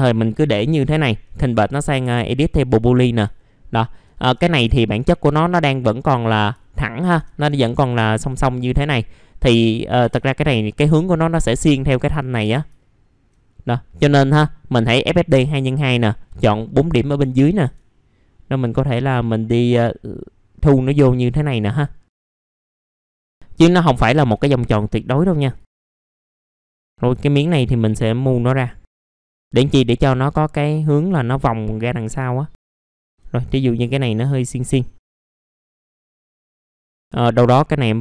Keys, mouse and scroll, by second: 1.2 right click, 2.6 click, 3.4 alt+middle click, 4.2 F4, 4.7 alt+middle click, 6.5 alt+middle click, 7.7-8.0 scroll down 1, 8.0 middle click, 9.4 click, 11.4 F3, 11.9 alt+middle click, 12.4 F3, 12.8 alt+middle click, 13.9 middle click, 16.9 alt+middle click, 17.5-18.6 scroll up 1, 18.6-22.1 drag, 22.2 middle click, 22.2 scroll down 1, 22.4 click, 22.6 alt+middle click, 22.9 alt+middle click, 24.0 alt+middle click, 25.5 click, 26.3 middle click, 26.5 click, 26.7 ctrl+click, 26.9 scroll up 1, 28.3 click, 30.0 alt+middle click, 30.9 middle click, 31.2 alt+middle click, 32.5 click, 32.7 alt+middle click, 33.0 middle click, 34.0 click, 35.1 i, 35.4 scroll down 1, 35.6 scroll up 1, 35.9 alt+middle click, 36.0 scroll down 1, 36.2 middle click, 36.7 alt+middle click, 36.9 middle click.